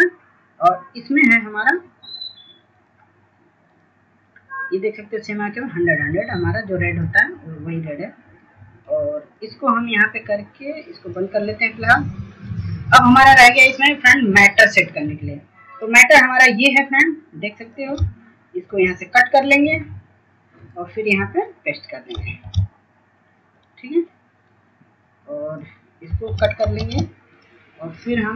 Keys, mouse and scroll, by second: 22.8 click, 23.8 click, 27.2-28.3 drag.